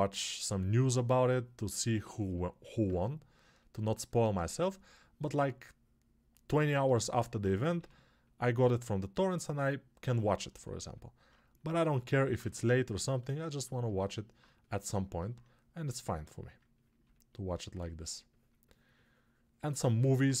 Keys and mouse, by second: 7.7 g, 10.4 alt+shift+right click, 11.2-20.4 shift+drag, 12.3 1.